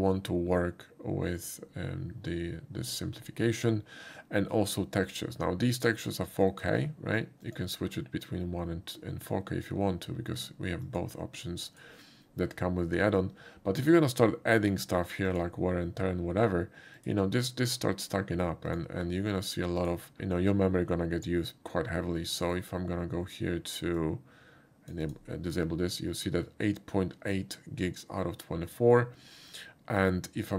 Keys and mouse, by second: 7.4 click, 10.9 click, 11.7 click, 13.8 click, 15.3 click, 17.0 click, 18.7 click, 19.8 click, 22.4 right click, 23.9-24.9 drag, 25.1 click.